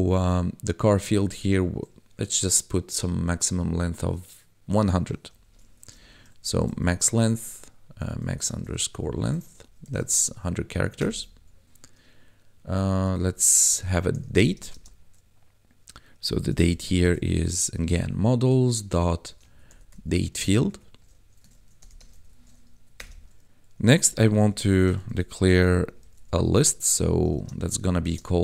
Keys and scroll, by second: 5.6 shift+9, 6.3 m, 6.4 a, 8.2 shift+-, 8.9 Tab, 9.5 1, 10.3 ctrl+s, 10.5 Right, 10.9 Return, 13.0-14.7 typing, 16.4-17.1 typing, 19.2-22.0 typing, 20.6 Tab, 22.3 ctrl+s, 22.7 Right, 22.9 Return, 23.2 ctrl+s, 24.0-28.0 typing.